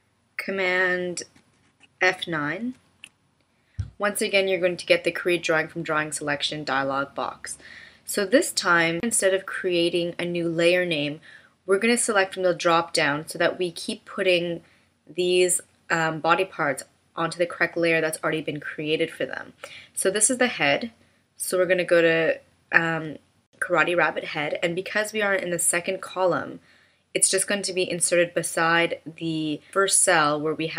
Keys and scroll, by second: 2.5 super+F9.